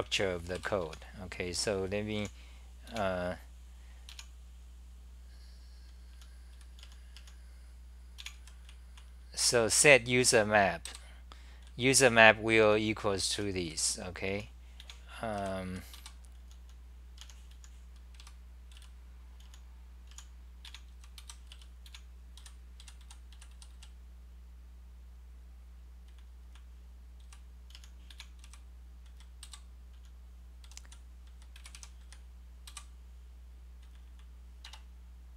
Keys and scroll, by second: 0.0-1.3 typing, 2.6-4.1 typing, 6.1-23.7 typing, 26.2-32.7 typing, 33.8 c, 34.0 c, 34.7 Tab.